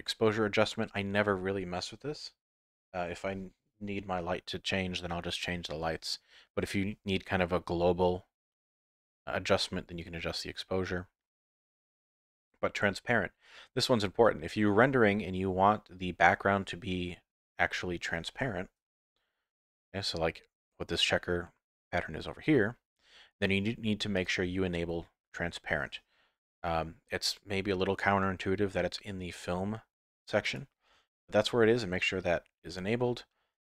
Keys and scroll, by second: 19.0 F11.